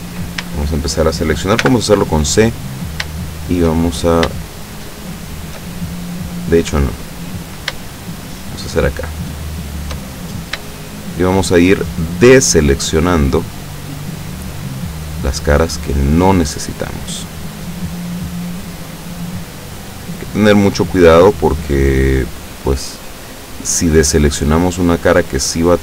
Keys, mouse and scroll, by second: 1.8 shift+c, 2.4-3.1 scroll up 1, 4.7 shift+click, 6.8 Escape, 8.3 shift+right click, 8.7 shift+right click, 9.7 shift+right click, 10.2-10.9 shift+scroll up 1, 10.9 shift+middle click, 12.9 shift+right click, 13.5 shift+right click, 14.0 shift+right click, 14.5 shift+right click, 14.9 shift+right click, 15.6 shift+right click, 16.1 shift+right click, 16.5 shift+right click, 16.9 shift+right click, 17.5 shift+right click, 17.9 shift+right click, 19.2 shift+right click, 20.4 shift+right click, 22.0 shift+right click, 22.5 shift+right click, 23.9 shift+right click, 24.9 shift+right click, 25.7 shift+right click.